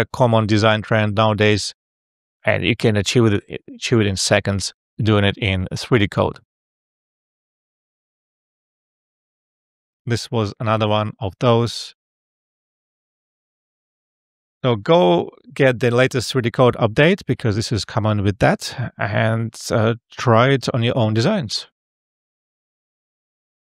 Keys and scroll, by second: 10.1 alt+f.